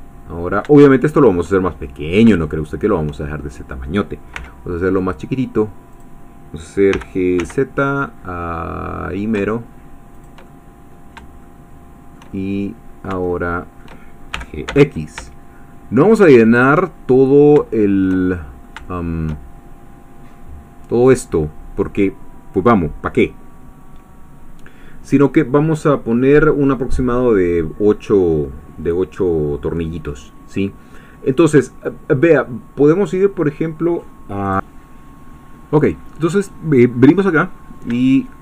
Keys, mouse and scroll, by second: 0.9 shift+middle click, 1.7-3.6 shift+middle drag, 4.4 s, 5.9 click, 6.9 g, 7.4 z, 10.2 shift+middle click, 10.5 shift+middle click, 11.4-14.0 shift+middle drag, 14.4 shift+g, 14.7 x, 16.6 shift+click, 16.8 shift+middle click, 18.6 shift+middle click, 34.4 click, 37.6-38.1 scroll up 1, 38.1-38.4 shift+middle drag.